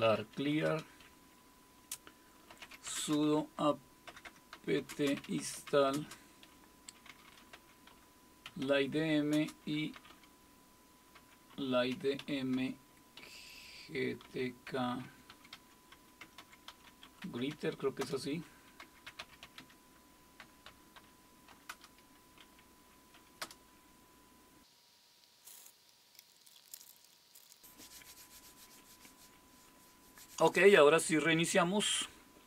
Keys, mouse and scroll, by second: 0.0-1.0 typing, 2.3-21.5 typing, 21.7 Return, 23.4 Return, 32.3-32.4 typing.